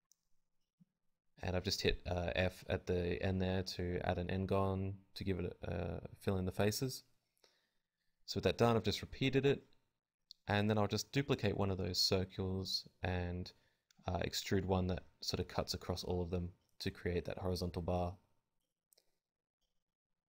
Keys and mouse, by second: 0.1 a, 0.2 shift+d, 1.9 Tab, 1.9 click, 2.3 Tab, 2.6-11.1 typing, 3.2-5.2 drag, 5.2 middle click, 5.6-6.6 drag, 10.4-11.8 drag, 12.3-13.9 drag, 12.3 g, 14.4 Tab, 15.5 Tab, 16.2 l, 16.2 KP_1, 16.5 g, 17.1 alt+s, 18.1 alt+s, 18.1 ctrl+n, 19.1 alt+s, 19.5 ctrl+n, 19.6 Tab, 19.9 a.